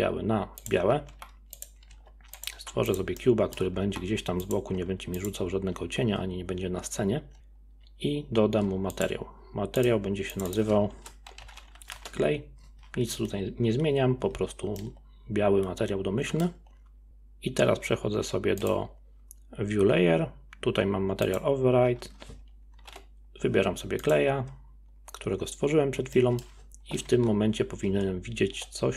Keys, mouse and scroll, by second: 1.1 g, 1.9 s, 3.2-3.9 middle drag, 3.9 g, 4.7 s, 9.0 click, 9.8-10.4 drag, 10.6-13.5 drag, 14.8-17.1 middle drag, 18.6 click, 21.2-24.3 drag, 26.2-27.2 middle drag, 27.2 KP_0, 28.0 z.